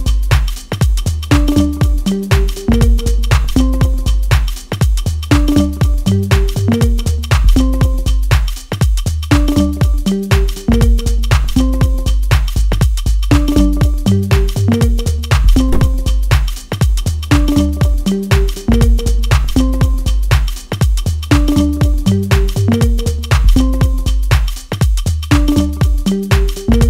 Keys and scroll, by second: 11.3 F3, 26.4 ctrl+z.